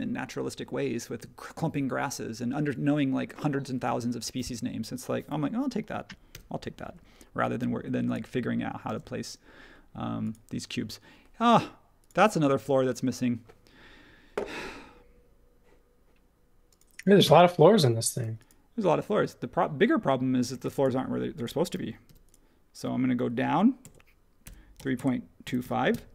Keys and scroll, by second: 6.3 m, 8.9 space, 22.0 m, 23.8-26.1 typing.